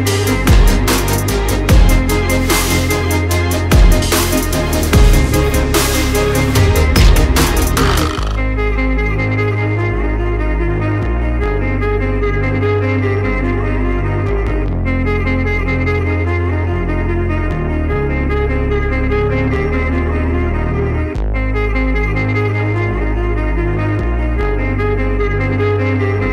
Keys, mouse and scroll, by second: 0.9 click, 1.4 click, 2.7 click, 4.8-6.1 typing, 7.6 click, 7.8 click, 9.8 click, 11.1 click, 11.1-12.0 typing, 11.2 click, 11.3 click, 13.6 click, 13.9-15.6 typing, 18.3 9, 18.5 Tab, 20.5-21.0 typing, 22.4-23.5 typing, 25.3 Tab, 26.1 Tab.